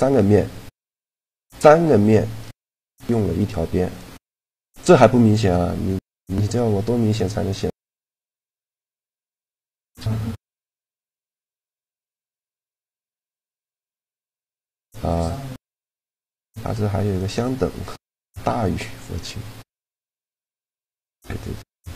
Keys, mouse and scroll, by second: 2.0 middle click, 3.0-9.8 middle drag, 13.3-14.7 drag, 14.7-16.4 middle drag, 17.1-19.0 drag.